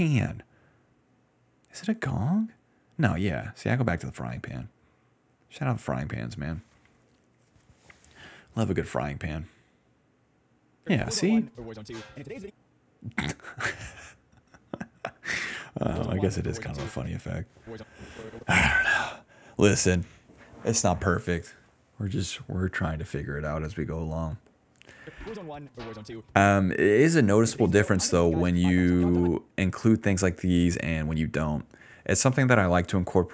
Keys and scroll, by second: 6.8 d, 6.9 d, 7.9 ctrl+c, 8.3 alt+v, 10.8 space, 11.7 s, 12.2 d, 12.4 space, 15.6 space, 17.0 space, 17.6 space, 17.7 space, 18.7 d, 23.4 s, 24.9 space, 26.4-29.2 typing.